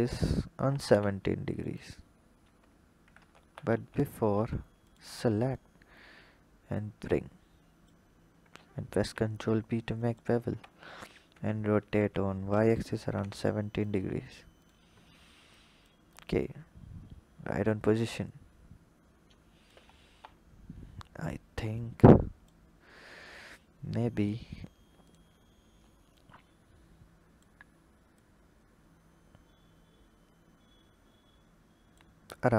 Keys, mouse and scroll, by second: 2.2 Tab, 3.1 ctrl+z, 3.4 ctrl+z, 4.2 Tab, 4.6 alt+click, 5.3 click, 8.7 ctrl+b, 10.3 Tab, 11.1 r, 14.4 click, 15.4 click, 15.9 click, 19.9 KP_1, 20.6-21.3 scroll up 4, 21.6 click, 22.6-24.0 scroll up 4, 24.0 click, 24.8 click, 26.0 click, 28.0 click, 32.2-32.5 scroll down 5.